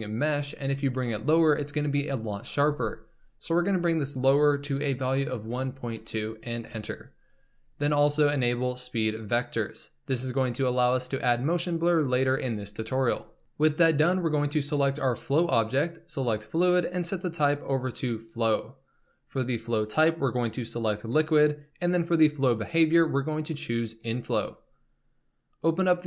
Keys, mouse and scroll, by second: 4.0-7.1 drag, 9.4-12.1 drag, 14.5 click, 16.3-26.0 drag.